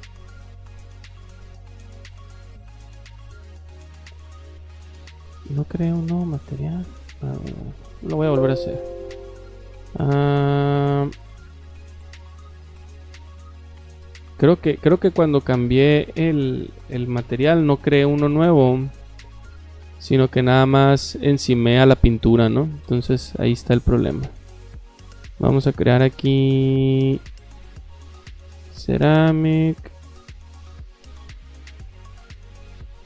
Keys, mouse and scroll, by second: 0.9-4.4 typing, 4.8 Escape, 4.9 Escape, 6.5 click, 7.5 click, 8.1 click, 9.2 click, 9.9 click, 13.2 click, 14.0 click, 14.9 click, 15.4 click, 16.5-18.1 typing, 19.2 click, 19.6 click, 21.3 click, 24.5 click, 28.2 click, 30.5 click, 31.1 click, 32.2 click.